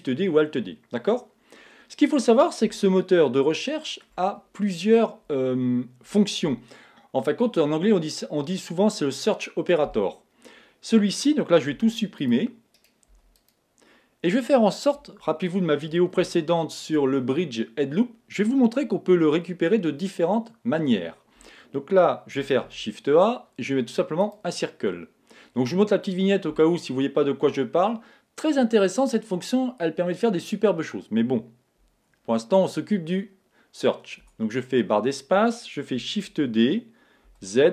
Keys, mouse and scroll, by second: 2.8-4.8 middle drag, 11.7 x, 12.7-14.7 right drag, 13.1 x, 14.9 KP_1, 16.3-18.1 middle drag, 22.6 shift+a, 34.2 Tab, 36.2 shift+d.